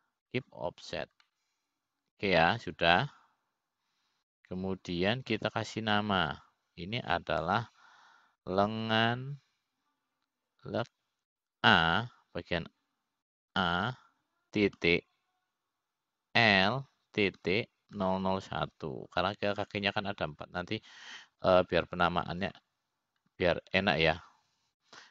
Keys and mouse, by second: 1.0 ctrl+p, 4.0-7.8 middle drag, 8.9 F2, 20.9 KP_0.